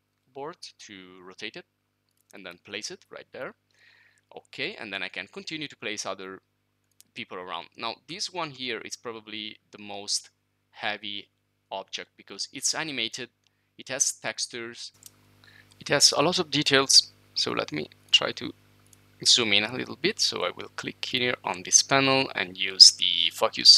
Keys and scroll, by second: 14.9-15.6 typing, 18.0-18.7 typing.